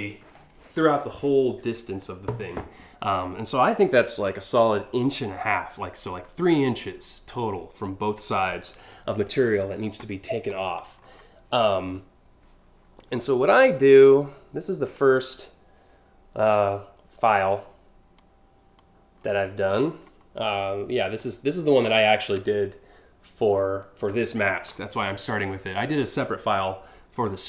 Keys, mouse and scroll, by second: 10.2-10.8 scroll down 4, 13.5 click, 14.5 click, 17.8 click, 20.8 scroll down 2, 21.2-21.7 scroll up 2.